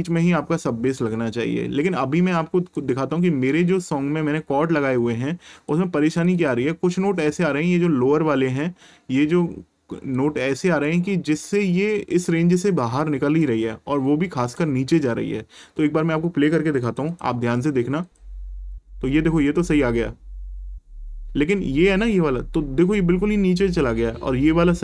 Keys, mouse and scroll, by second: 2.7 click, 6.1 click, 10.1 click, 13.4 click, 16.8 click.